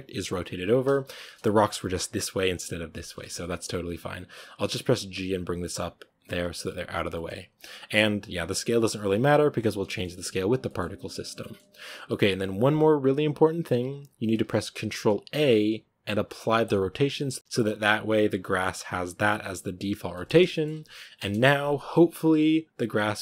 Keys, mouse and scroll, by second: 0.6-1.1 scroll down 1, 1.1-1.4 middle drag, 1.4-2.9 scroll up 1, 2.9 scroll up 1, 2.9 middle click, 3.8-4.6 scroll down 1, 4.6 scroll up 1, 4.8 g, 6.1-9.1 middle drag, 9.1-9.8 scroll up 1, 9.8-14.5 shift+middle drag, 14.5-15.1 scroll up 1, 16.6 ctrl+a, 19.3-19.6 scroll down 2, 20.0-21.1 middle drag, 21.1 KP_0, 22.1 scroll up 1.